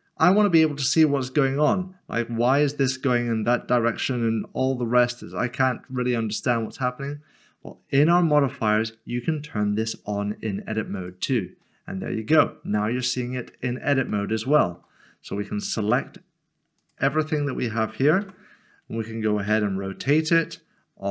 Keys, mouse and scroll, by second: 7.9 Tab, 11.0 click, 12.5 scroll up 1, 13.5 middle click, 14.1 shift+middle click, 15.9 typing, 16.8 click, 18.2 typing, 19.4 typing.